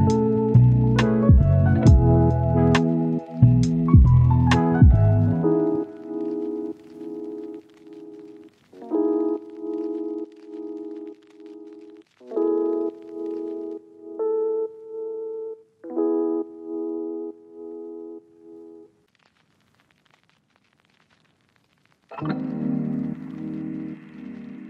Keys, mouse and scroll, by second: 1.1 click, 1.3-1.9 scroll down 1, 1.9 scroll up 1, 2.1 right click, 4.5 click, 4.7 scroll down 1, 4.9-5.6 scroll up 1, 5.6 scroll down 1, 5.8 scroll up 1, 6.0 click, 6.6 scroll down 1, 6.7-7.3 scroll up 2, 6.9 right click, 8.5 click, 8.7-9.3 scroll down 1, 9.3-10.4 scroll up 1, 10.4 click, 10.6 scroll down 1, 10.8-11.3 scroll up 1, 11.3 click, 11.8 right click, 12.0 scroll down 1, 12.1-12.4 scroll up 1, 12.5 right click, 14.1-14.5 scroll down 1, 14.5 right click, 15.9 click, 16.0 scroll down 1, 16.3 scroll up 1, 16.5 right click, 16.8 click, 17.5 scroll down 1, 17.6-18.5 scroll up 1, 18.5 click, 18.7 right click, 18.9 scroll down 1, 19.1-20.6 right drag, 21.3 click, 22.7 scroll down 1, 22.8 scroll up 1, 23.0 right click, 23.5-23.8 scroll up 1, 23.8 right click, 24.1 scroll down 1, 24.3 scroll up 1, 24.4 right click.